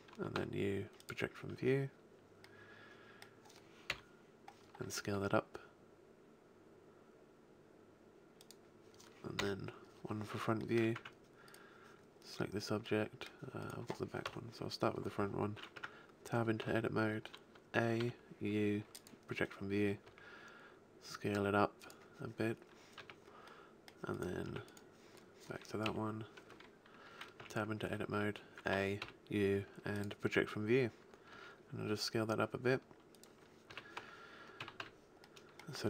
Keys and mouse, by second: 0.4 u, 3.9 KP_1, 5.1 s, 8.5 click, 9.3 click, 9.3 KP_1, 10.9 Tab, 14.2 KP_1, 15.7 Tab, 16.6 a, 17.9 u, 20.1 s, 22.9 a, 24.5 Tab, 25.8 KP_1, 27.4 Tab, 27.4 q, 28.1 a, 29.0 u, 31.3 s, 33.7 a, 33.9 Tab, 34.6 a, 34.7 z.